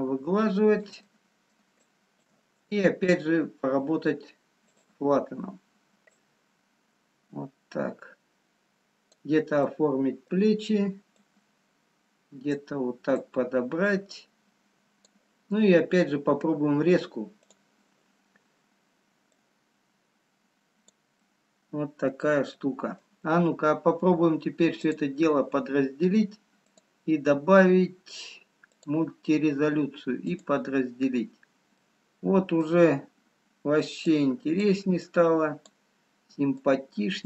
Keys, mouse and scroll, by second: 1.1 middle click, 2.0 shift+click, 4.6 click, 5.9 scroll up 2, 6.4 click, 9.7 middle click, 12.3 click, 13.7 click, 19.7 click, 19.7 scroll up 1, 21.3 middle click, 22.5 middle click, 25.2 click, 27.0 click, 30.3 click, 32.6 middle click, 33.7 scroll up 1, 36.8 click.